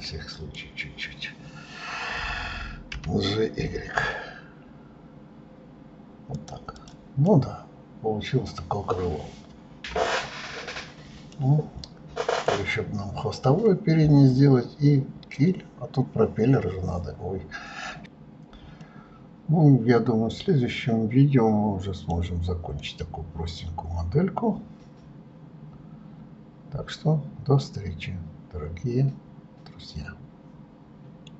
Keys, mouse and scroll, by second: 6.9 click, 7.4-10.3 middle drag, 10.3-10.9 scroll down 2, 10.9-11.5 scroll up 2, 11.5-14.5 middle drag, 18.7 scroll up 1, 18.8-21.8 middle drag, 22.1-22.7 scroll down 3, 22.7-25.8 middle drag.